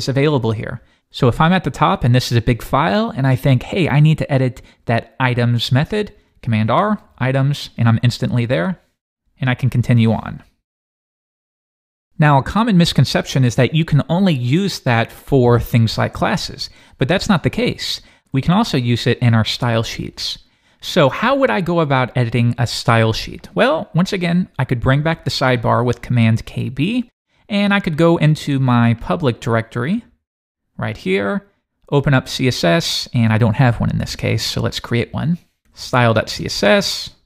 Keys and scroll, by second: 6.7 super+r, 7.3 Return, 9.3 Right, 25.0 super+k, 25.2 super+b, 35.6 super+s.